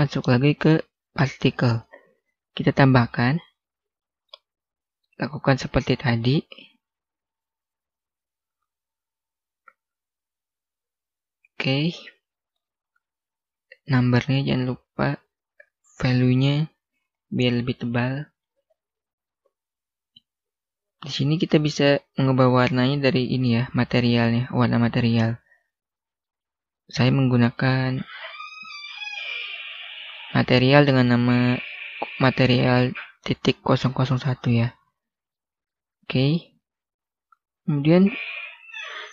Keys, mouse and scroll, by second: 0.5 click, 10.7 1, 10.9 Return, 11.9 middle click, 13.4 click, 15.1 0, 16.6 Return, 17.1 middle click, 18.6-19.1 scroll up 1, 19.1 scroll down 1, 20.8 click, 26.7-29.0 scroll up 1, 36.1-37.2 scroll down 1, 37.7-39.1 scroll up 1.